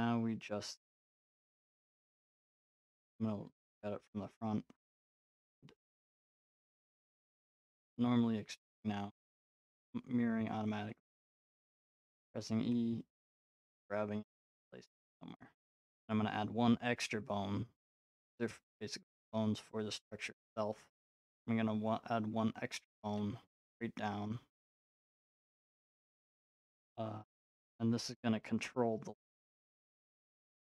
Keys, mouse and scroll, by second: 0.8 middle click, 1.8 middle click, 2.2 middle click, 3.9 middle click, 4.3-10.7 drag, 9.6 e, 10.7 e, 11.4 click, 11.5 e, 12.5 click, 12.6 e, 13.6 click, 13.8 e, 15.5-17.5 drag, 17.5-19.6 middle drag, 21.9-24.0 middle drag, 23.0 e, 24.9 z, 25.6-26.6 drag, 26.6-28.7 middle drag, 30.0 middle click.